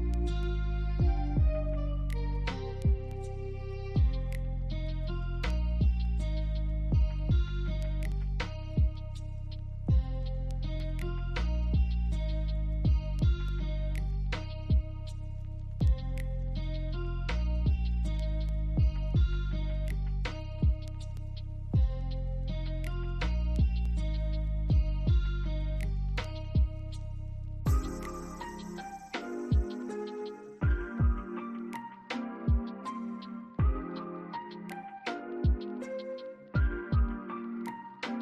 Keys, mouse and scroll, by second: 3.1 scroll up 1, 3.8 BackSpace, 4.4 scroll up 1, 6.1 BackSpace, 6.4 scroll down 1, 7.7 alt+scroll down 1, 7.8 alt+middle click, 8.1 alt+scroll up 1, 9.7 BackSpace, 10.0 scroll up 1, 11.7 BackSpace, 12.3 middle click, 13.9-14.3 scroll down 1, 14.5 alt+middle click, 14.9 alt+click, 15.4 alt+middle click, 15.8 alt+click, 18.1 alt+click, 19.4 alt+middle click, 19.8 alt+click, 21.2 alt+click, 22.7 double click, 23.3 alt+middle click, 23.7 alt+click, 25.0 alt+click, 26.4 alt+click, 27.2-28.3 scroll up 1, 28.4 alt+click, 32.6 double click, 33.2 alt+middle click, 33.7 alt+click, 34.5 BackSpace, 35.3 alt+middle click, 35.8 alt+click, 37.6 double click.